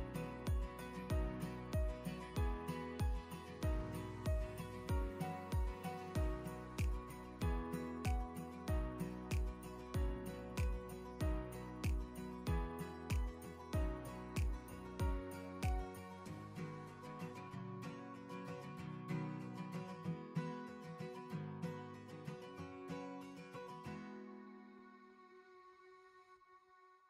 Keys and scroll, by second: 3.0 Up.